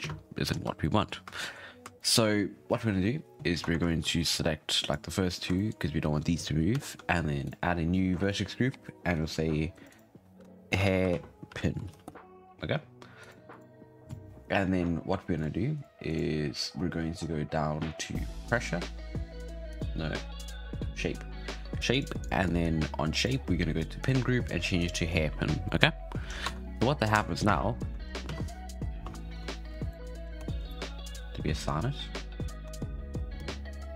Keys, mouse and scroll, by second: 0.0 space, 0.4-0.8 scroll up 7, 0.8-1.2 shift+middle drag, 1.2 shift+scroll up 1, 1.3-1.8 shift+middle drag, 1.8 shift+scroll up 1, 1.9-2.3 shift+middle drag, 2.3-3.6 scroll up 1, 3.6 Tab, 3.8 shift+middle click, 4.0-4.6 scroll up 5, 4.6 click, 5.4 scroll up 1, 5.5-7.4 shift+middle drag, 7.4 click, 8.2-9.1 drag, 9.7 click, 12.8 click, 13.2 click, 13.5 click, 14.0 drag, 14.3-15.3 scroll down 6, 15.3-16.7 drag, 16.7-18.4 scroll down 18, 18.4 click, 19.7 click, 20.5-21.9 scroll down 2, 21.9 click, 23.1 click, 23.3-24.0 scroll down 8, 24.0-25.6 drag, 25.6 shift+middle click, 25.8-26.3 scroll down 2, 26.3 scroll up 2, 26.4 Tab, 27.1 shift+Left, 27.4 space, 27.8-28.2 scroll down 6, 28.2 space, 29.3 shift+Left, 29.9-30.2 shift+middle drag, 30.2 scroll up 1, 30.3 Tab, 30.6 shift+middle drag, 30.8-31.5 scroll up 2, 31.5-32.6 drag, 32.6 Tab, 32.9-33.3 scroll down 5, 33.3 space, 33.8-33.9 scroll down 1.